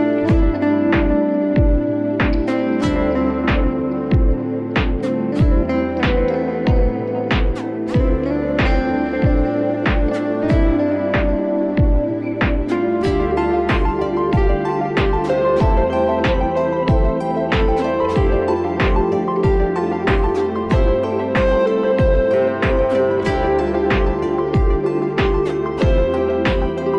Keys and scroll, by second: 8.3 Escape.